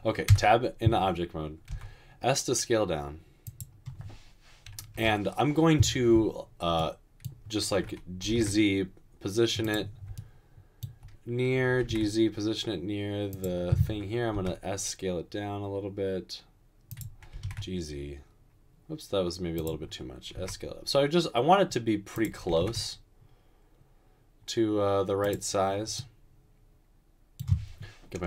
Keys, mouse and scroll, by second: 0.4 Tab, 1.7 typing, 5.4 typing, 8.3 typing, 11.8 typing, 14.3 typing, 17.1-17.8 typing, 20.3 typing, 22.3-23.0 typing.